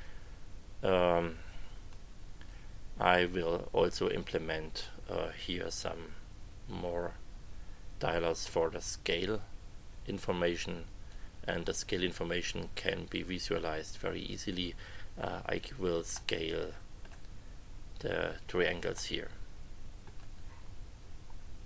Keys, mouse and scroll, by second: 11.1 click, 16.1 middle click, 16.7 click, 17.1 middle click, 18.9 middle click, 19.3 click, 21.6 click.